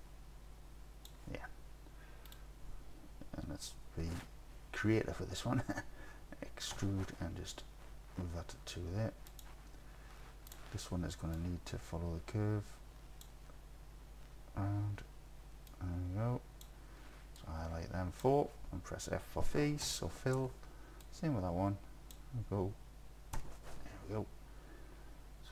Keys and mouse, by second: 6.8 e, 9.3 click, 10.5 click, 11.5-13.2 drag, 15.7 click, 17.4 click, 19.9 f, 21.0-22.2 drag, 23.4 f.